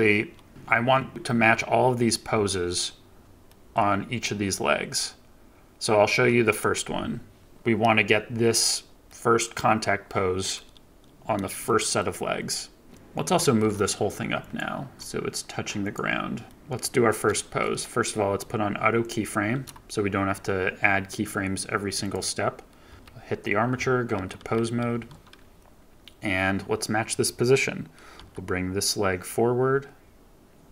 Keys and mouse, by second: 1.1-3.2 drag, 3.4 shift+middle drag, 9.2 click, 11.6-11.9 shift+middle drag, 11.9-12.8 drag, 12.8 ctrl+z, 13.4 g, 13.5 z, 14.3-14.9 drag, 16.4 shift+middle drag, 17.2-17.5 shift+middle drag, 18.9 middle click, 21.9 click, 24.1 ctrl+Tab, 28.1 g.